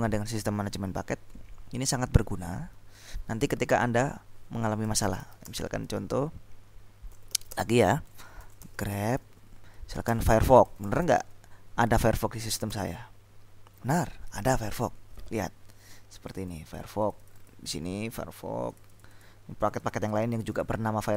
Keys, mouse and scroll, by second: 4.7-5.9 typing, 7.0-11.7 typing, 12.9 Return, 16.4-18.0 scroll up 2, 18.8-20.4 scroll up 2, 20.6-21.1 scroll up 2.